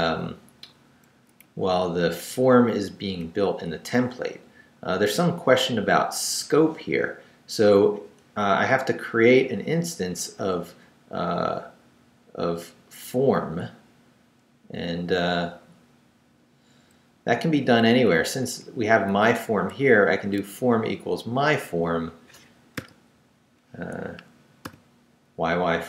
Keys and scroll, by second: 0.5 Down, 1.1 Up, 1.4 Down, 2.5 Up, 5.2 Down, 6.4 Up, 8.5 Up, 10.6 Up, 14.9 Right, 17.1 Left, 17.8 Up, 19.1 Down, 22.8 y, 24.6 y.